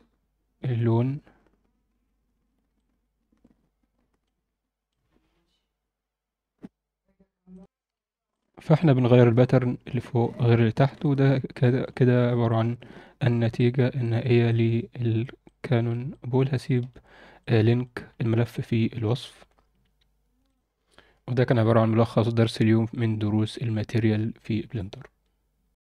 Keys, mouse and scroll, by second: 2.0 scroll up 1, 2.7-4.2 drag, 4.8-6.6 drag, 7.6 click, 8.3 click, 8.7 click, 9.4 click, 10.4-10.9 scroll down 2, 11.0 alt+shift+middle click, 11.6 alt+shift+middle click, 12.1 scroll up 1, 12.5 alt+middle drag, 13.5 click, 14.0 ctrl+alt+middle click, 14.5-15.2 ctrl+alt+middle drag, 15.4-15.9 alt+middle drag, 16.1 alt+middle drag, 16.5 alt+middle drag, 17.3 click, 18.0-18.4 scroll up 2, 18.5-19.2 alt+middle drag.